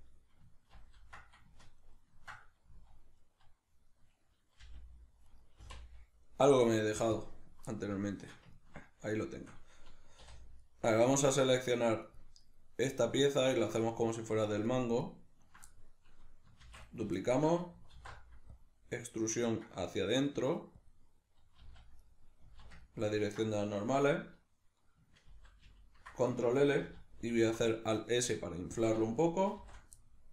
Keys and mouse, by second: 0.7 ctrl+l, 2.7 z, 4.7 g, 5.4 right click, 5.6 x, 7.7-10.6 middle drag, 10.2 3, 10.6 right click, 11.2 ctrl+right click, 12.0 ctrl+right click, 12.4 ctrl+right click, 12.9 ctrl+right click, 13.3 ctrl+right click, 13.8 middle click, 14.7 ctrl+right click, 15.1 ctrl+right click, 15.7-17.0 middle drag, 16.7 shift+d, 17.0 right click, 17.2-21.6 ctrl+middle drag, 18.0 alt+e, 20.9 click, 21.6 z, 22.1-28.9 middle drag, 22.5 z, 25.3 ctrl+l, 28.9 shift+click, 29.7 shift+n, 30.0-30.3 middle drag.